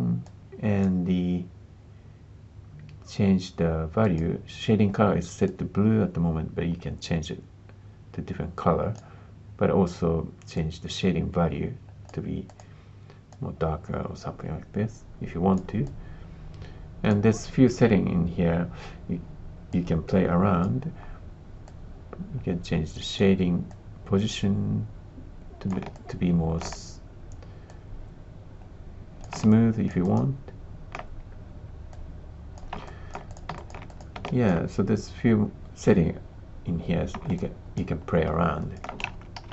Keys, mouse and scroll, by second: 0.3 click, 4.0 click, 10.5-12.0 drag, 12.4 click, 19.7 click, 21.6-23.1 drag, 23.6-25.7 drag, 25.9 alt+click, 27.6-29.3 drag, 29.4 alt+click, 30.0 alt+click, 31.9 click, 32.8 alt+click, 33.3 click, 33.5 alt+click, 33.9 click, 34.2 alt+click, 37.3 alt+click, 38.5 alt+click, 39.1 shift+z, 39.3 shift+z.